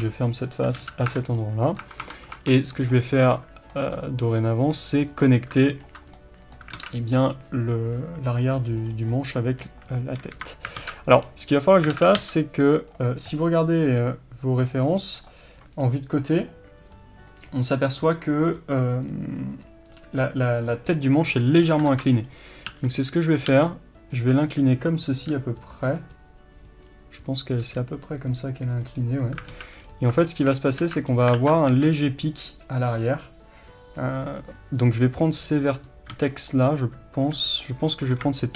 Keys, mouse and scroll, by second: 0.9 f, 1.1 scroll down 1, 1.2 Tab, 1.4-5.2 middle drag, 1.9 Tab, 2.4-3.3 scroll up 4, 2.5 Tab, 3.9 scroll down 2, 5.2 click, 6.2 middle click, 6.8 alt+a, 7.0 click, 8.9 scroll down 2, 9.2-14.7 middle drag, 10.4 KP_3, 10.8 alt+z, 11.2-12.0 scroll up 1, 12.0 alt+a, 12.9 b, 15.3-21.3 middle drag, 21.3 click, 21.7 scroll down 1, 21.9 ctrl+z, 22.3-22.8 scroll up 1, 22.8 r, 23.5 g, 29.6 alt+a, 29.9-30.2 scroll up 1, 30.2-38.5 shift+middle drag, 30.9 alt+z, 31.1 scroll up 1, 31.4 alt+z, 32.1 b, 38.1 KP_3.